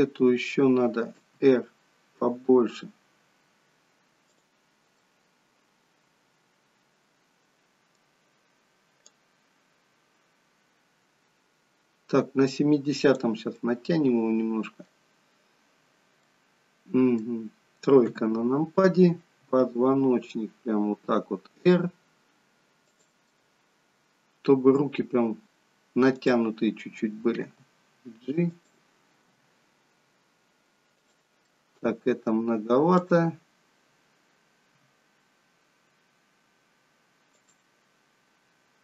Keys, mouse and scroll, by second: 1.3 r, 5.0 middle click, 9.1 click, 13.6 middle click, 16.1 middle click, 18.0 KP_3, 19.4 r, 23.3 middle click, 26.1 click, 27.3 g, 29.3 g, 31.5 middle click, 33.0 click, 34.8 r.